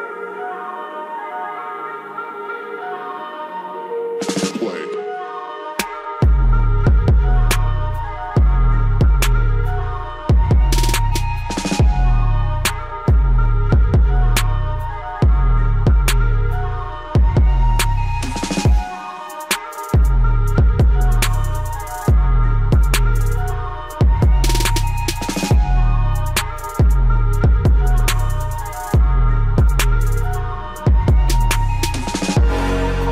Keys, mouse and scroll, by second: 1.2 click, 3.3 right click, 6.5 click, 8.3-18.7 drag, 18.7 g, 19.4-21.3 drag.